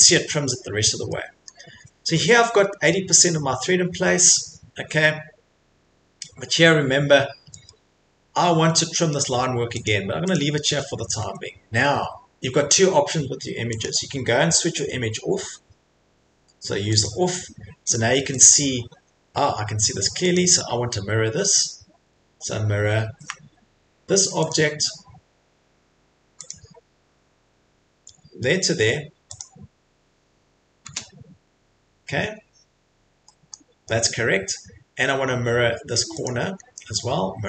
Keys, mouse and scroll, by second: 0.4 middle click, 0.5 middle click, 0.6 middle click, 1.5 middle click, 2.9 middle click, 3.6 middle click, 4.7 middle click, 7.8 middle click, 7.8 middle click, 8.7 middle click, 9.9 click, 10.3 click, 10.5 Escape, 10.8 Escape, 10.9 middle click, 11.0 middle click, 11.2 Escape, 13.8 click, 16.8 click, 17.0 click, 17.9 click, 18.4 click, 18.8 middle click, 18.8 middle click, 18.9 Escape, 19.2 Escape, 20.3 click, 24.5 click, 26.5 click, 29.4 click, 30.8 click, 31.5 scroll, 32.3-32.7 scroll, 33.2-33.7 scroll, 34.6-35.5 scroll, 36.2 middle click, 36.2 click, 36.7 middle click.